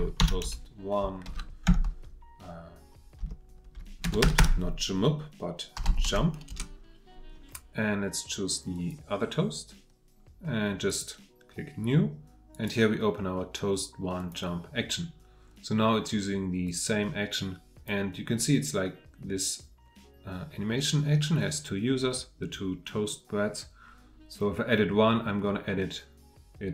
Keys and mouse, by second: 1.0 shift+click, 4.2 BackSpace.